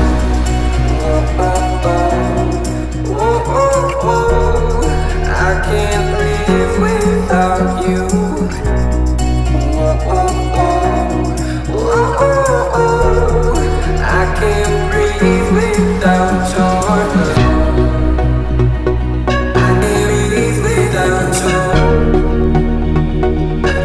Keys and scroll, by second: 6.5 space, 9.8 m, 11.7 Left, 12.0 Right, 16.6 space.